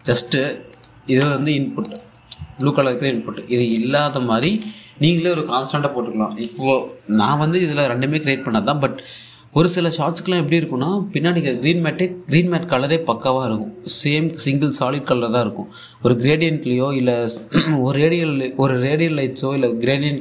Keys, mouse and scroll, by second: 1.4 click, 1.7 1, 2.5 click, 2.6 1, 3.2 click, 5.1 1.